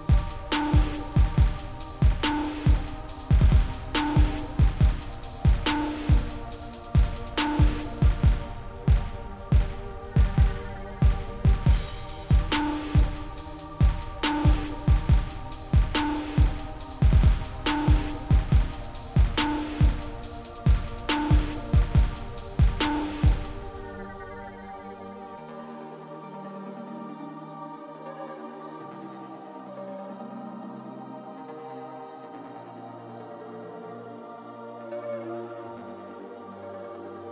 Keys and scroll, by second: 0.9 5, 2.8 space, 9.5 space, 16.7 u, 21.9 2, 25.1 F9, 25.8 space, 31.5 space.